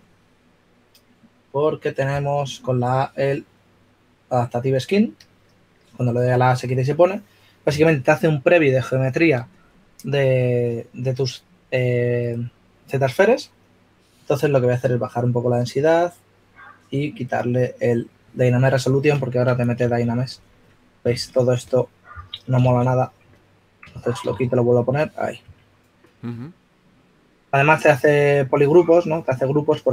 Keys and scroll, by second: 21.3-22.0 typing, 26.0 typing, 28.3 shift+f.